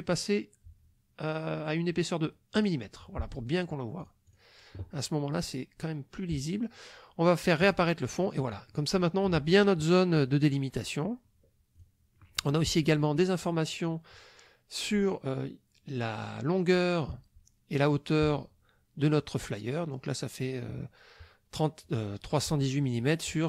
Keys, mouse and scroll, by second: 2.6 click, 4.0 click, 7.6 click, 8.1 click, 11.8 click.